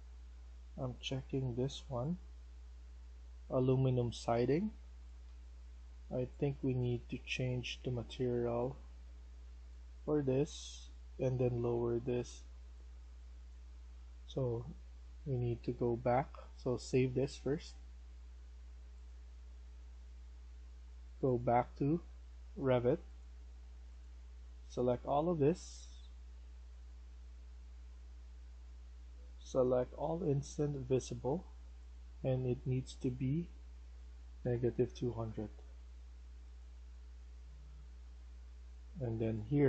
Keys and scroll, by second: 3.1-13.1 typing, 34.1-35.5 typing, 38.0 Escape, 38.3 Escape.